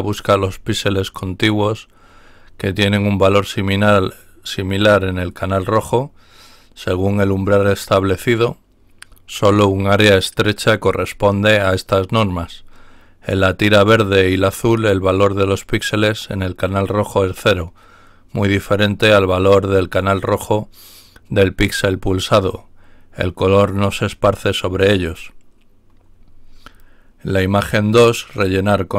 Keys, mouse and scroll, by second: 26.6-27.1 scroll down 2.